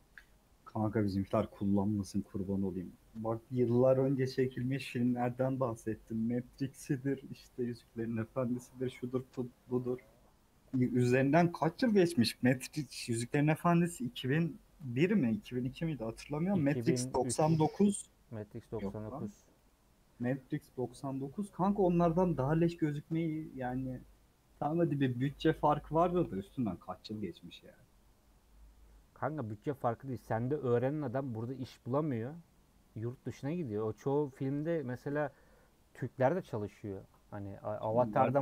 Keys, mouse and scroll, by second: 23.6-24.6 middle drag, 24.6-25.1 scroll up 3, 25.1-36.9 middle drag, 36.9 Tab, 37.3-38.4 middle drag.